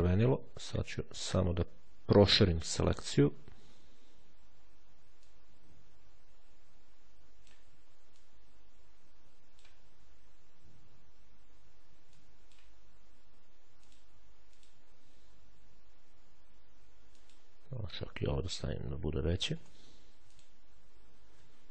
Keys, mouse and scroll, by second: 1.1 z, 2.7-3.6 ctrl+shift+scroll down 3, 5.1-7.8 drag, 8.0-9.9 drag, 11.9 click, 13.7 click, 14.4 click, 16.8 click, 17.8 3, 18.3 0, 19.3 BackSpace, 20.2 click.